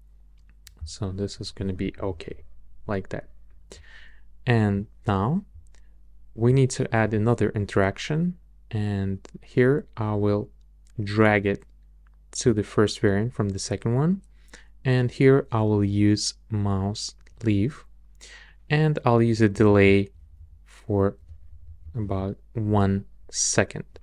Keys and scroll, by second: 1.6 Down, 19.5 Up, 20.0 Up.